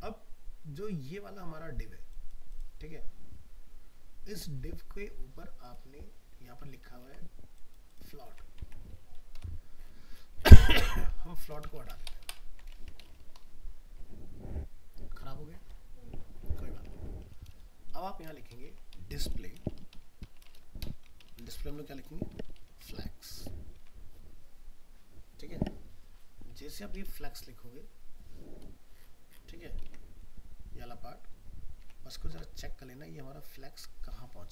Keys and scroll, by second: 6.6 ctrl+s, 8.6 alt+Tab, 12.5 ctrl+s, 12.8 alt+Tab, 16.8 alt+Tab, 23.7 ctrl+s, 26.5 alt+Tab, 29.9 alt+Tab.